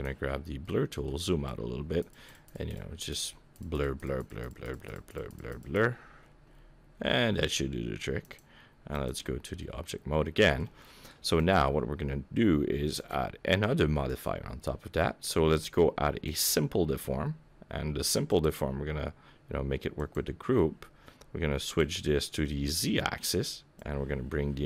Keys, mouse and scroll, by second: 0.3-0.6 scroll down 4, 0.6 middle click, 1.1-2.1 scroll down 2, 1.5 click, 2.2 click, 2.4 click, 2.6 click, 2.9 click, 3.3 click, 3.7 click, 3.9 click, 4.2 click, 4.4 click, 4.6 click, 4.9 click, 5.1 click, 5.3 click, 5.5 click, 5.7 click, 5.9-6.9 scroll up 13, 6.9-8.2 scroll down 1, 8.2 click, 8.2 scroll down 2, 9.6 middle click, 10.7 middle click, 11.3 click, 12.9 click, 14.0 click, 18.2 click, 21.6 click, 23.7 click.